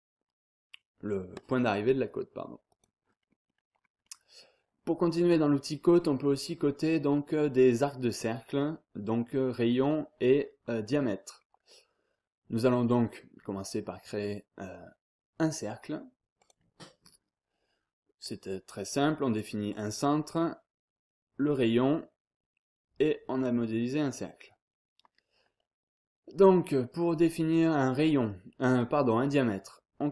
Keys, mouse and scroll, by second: 2.7 click, 3.2 scroll down 1, 3.5-3.8 scroll up 1, 3.8 scroll down 1, 4.1-4.7 scroll up 1, 6.2 scroll down 1, 6.3-6.8 scroll up 1, 6.8 scroll down 1, 7.1-7.8 scroll up 1, 8.4 scroll down 1, 8.6-9.3 scroll up 1, 9.6 scroll down 1, 9.9-10.5 scroll up 1, 11.4 scroll down 1, 11.7-12.2 scroll up 1, 16.4 click, 19.7 click, 21.5 click, 24.0-24.5 scroll up 1.